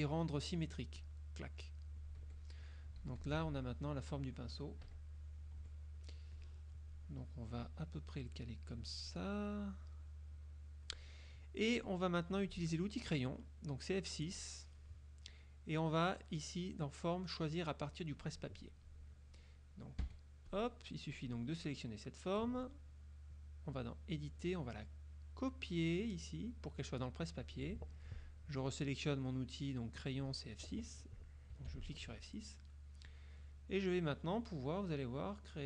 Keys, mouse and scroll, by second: 1.1 click, 2.3 F1, 3.1 z, 3.3 click, 4.9 KP_Subtract, 5.7 F1, 6.5 click, 7.7-9.0 drag, 9.5 click, 10.5-11.1 drag, 13.6 click, 14.4 click, 20.1 F1, 20.6 click, 21.1 click, 23.8-26.8 drag, 31.6 F6, 33.1 click, 35.2-35.6 drag.